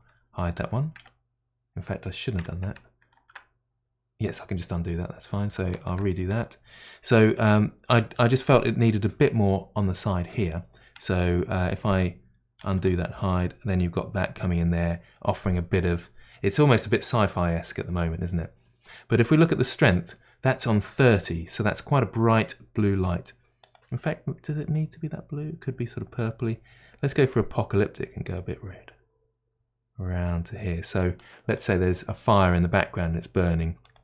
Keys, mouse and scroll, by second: 0.6 h, 3.7 ctrl+z, 6.1 ctrl+shift+z, 13.1 ctrl+z, 23.6 click, 24.8 click.